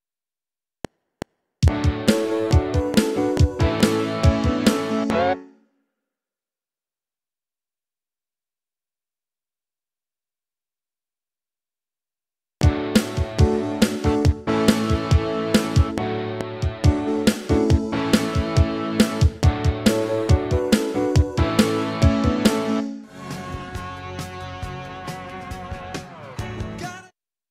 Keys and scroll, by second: 0.7 F7, 5.3 space, 9.4 Up, 12.4 space, 22.7 space, 26.8 space.